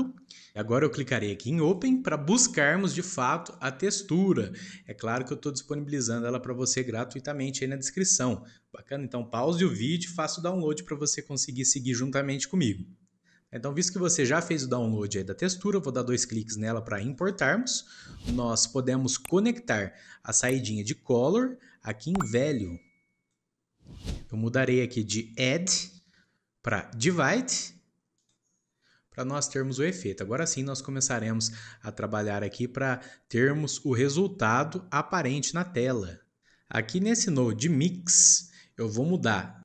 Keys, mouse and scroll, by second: 1.6-4.7 drag, 18.1-21.2 shift+middle drag, 21.2 click, 25.6 click, 29.6 shift+middle click, 30.1 scroll down 1, 30.4 shift+middle click, 30.6-31.5 scroll up 1, 31.5 scroll up 1, 31.6-32.8 shift+middle drag, 32.8 click, 34.5 click.